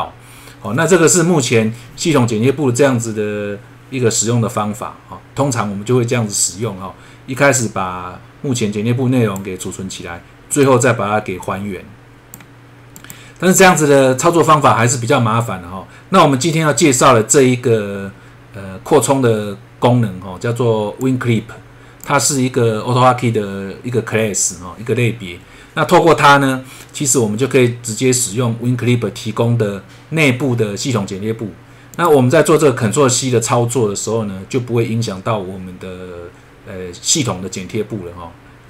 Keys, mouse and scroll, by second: 7.6 click, 10.5 click, 11.4 click, 13.0 click, 18.5 scroll up 1, 21.0 click, 31.9 click.